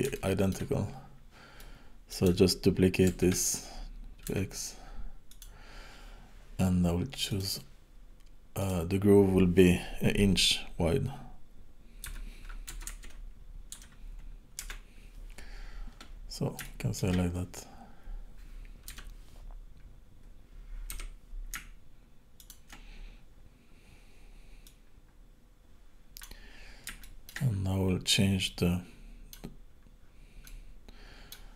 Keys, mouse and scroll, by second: 0.2 shift+middle click, 0.9-1.6 scroll up 2, 1.6 middle click, 3.2 shift+d, 7.3 click, 8.6 click, 16.7 shift+middle click, 18.9 KP_7, 19.5 scroll down 1, 19.9-21.0 scroll up 1, 21.0 r, 24.6 click, 26.4-26.9 scroll up 4, 27.0 shift+middle click, 27.5-28.1 scroll up 5, 28.5 middle click, 29.6-30.1 scroll down 9, 30.4 middle click.